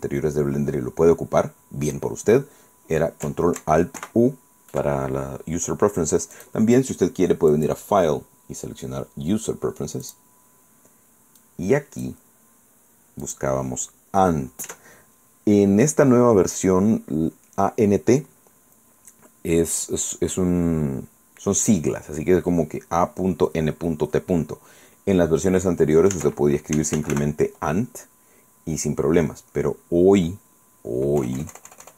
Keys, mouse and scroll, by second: 4.0 ctrl+alt+u, 6.4 click, 7.5 click, 10.1 click, 11.4 click, 13.3 click, 14.7 Caps_Lock, 26.2 Caps_Lock, 26.5-27.6 typing, 31.2 BackSpace.